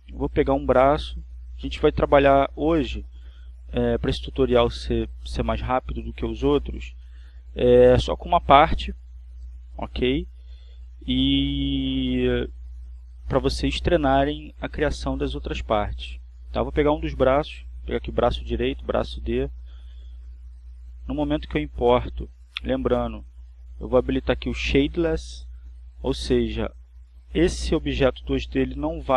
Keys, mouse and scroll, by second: 1.9 click, 21.8-23.9 drag, 24.8 click.